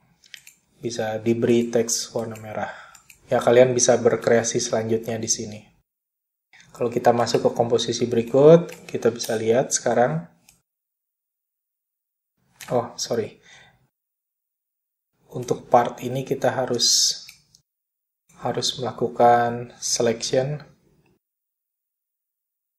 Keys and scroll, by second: 8.3 ., 15.5 space.